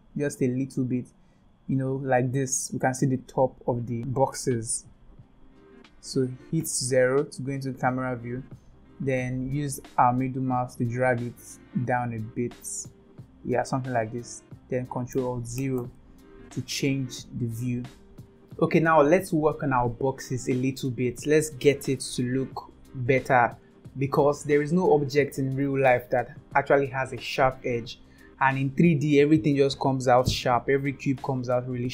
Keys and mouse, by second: 6.6 KP_0, 9.1-13.6 middle drag, 15.6 ctrl+alt+KP_0, 31.2-31.9 middle drag.